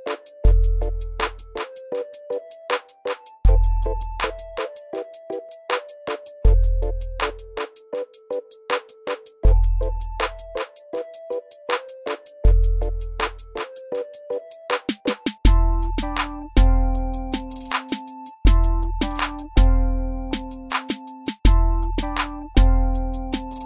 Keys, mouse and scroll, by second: 0.6 x, 1.2-3.2 drag, 4.2 ctrl+scroll down 1, 4.2 shift+right click, 4.3 scroll up 3, 4.4 click, 8.4-13.0 ctrl+shift+drag, 17.6 x, 18.2 click, 19.0 shift+right click, 19.6 ctrl+scroll down 1, 19.8 shift+right click, 19.8 ctrl+scroll up 1, 20.0 click, 20.8 click, 21.8 super+Right, 22.4 click, 22.9 ctrl+scroll down 1, 23.0 shift+right click, 23.1 click.